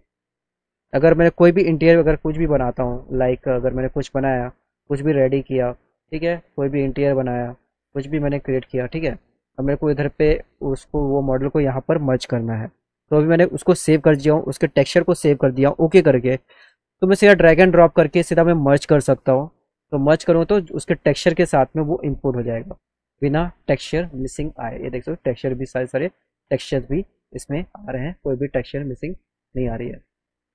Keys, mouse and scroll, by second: 0.3 click, 2.6 click, 3.7 click, 4.9 click, 6.8-8.1 drag, 8.5 middle click, 9.1 middle click, 9.3 click, 10.5 click, 12.9 click, 13.5 click, 16.9-17.9 drag, 18.8 click, 21.7 click, 22.5 scroll up 1, 29.6 click.